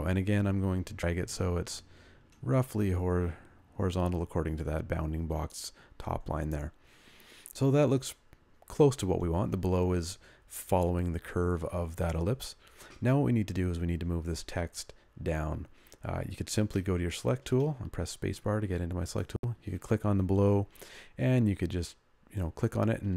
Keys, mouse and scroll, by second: 17.2 space, 22.9 ctrl+click.